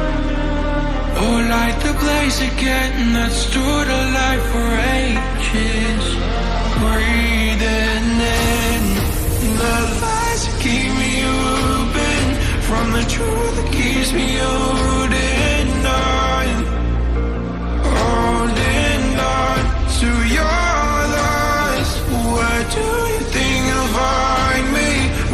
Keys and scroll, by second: 0.0-2.0 typing.